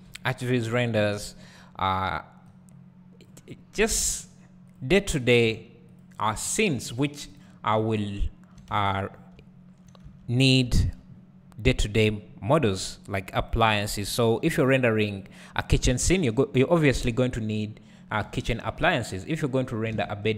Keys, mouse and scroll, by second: 2.5-4.8 drag, 4.2 g, 5.3 click, 5.5 g, 7.8 `, 8.8 Tab, 9.1 scroll down 1, 9.4 `, 10.2 Tab, 10.3-10.7 scroll up 1, 10.7 `, 15.2-18.3 drag, 18.3 g, 20.0 alt+a, 20.2 `.